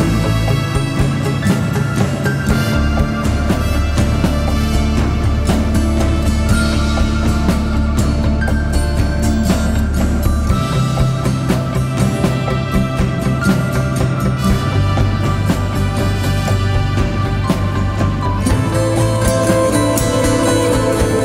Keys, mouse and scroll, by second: 18.7 shift+click, 20.5 double click.